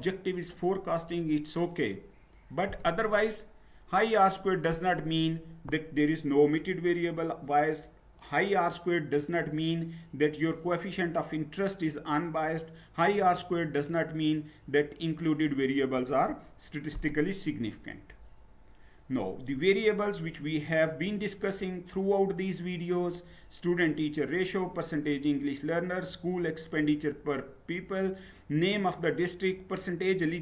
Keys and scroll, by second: 17.5 Down.